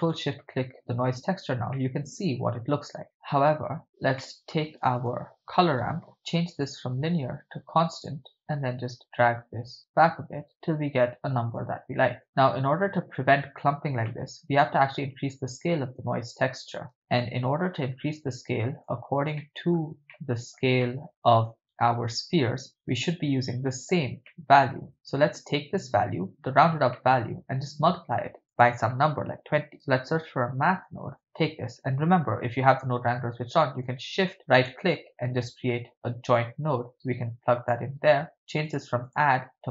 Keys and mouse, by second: 0.3 ctrl+shift+drag, 1.8-3.6 middle drag, 4.2-4.6 middle drag, 4.6 shift+a, 6.5-8.3 drag, 8.9-9.4 drag, 9.8-11.6 drag, 12.2 middle click, 12.2 click, 14.0-14.6 ctrl+middle drag, 15.3-19.1 drag, 19.4 shift+middle click, 20.1 ctrl+middle click, 20.9 middle click, 22.7-23.9 drag, 24.3 middle click, 25.0 click, 26.9-27.4 middle drag, 28.3 shift+a, 33.8 shift+right click, 36.4-37.8 drag, 38.1 ctrl+middle click, 38.6 click, 39.1-39.7 drag.